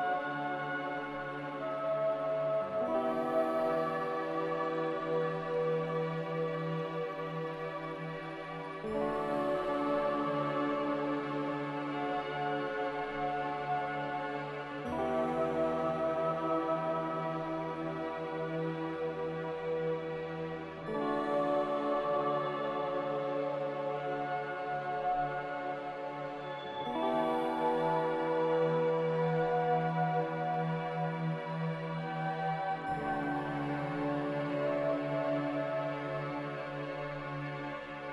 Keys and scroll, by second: 0.0-4.4 typing, 8.0 f, 14.3 n, 15.5 f.